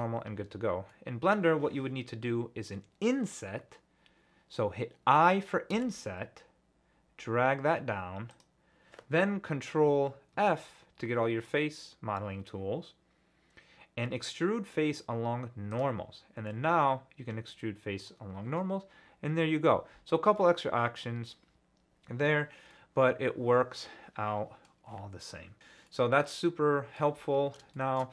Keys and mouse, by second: 0.9 click, 5.7 i, 8.3 click, 10.3 ctrl+f, 18.0 click, 20.4 middle click, 22.3 middle click, 24.2 middle click, 25.9-27.0 middle drag, 28.0 middle click.